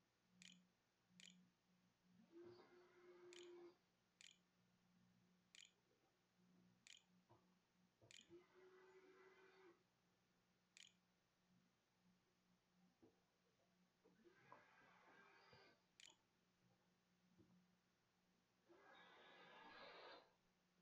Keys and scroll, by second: 0.0-1.0 typing, 3.6 shift+Caps_Lock, 3.7-12.4 typing, 15.8 =, 16.2 -.